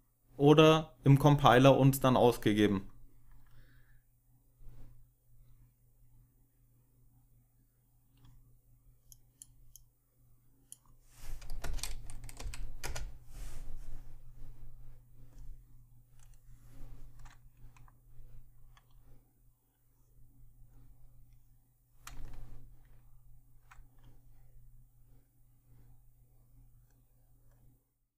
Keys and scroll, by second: 11.5 BackSpace, 12.3 Home, 12.7 BackSpace.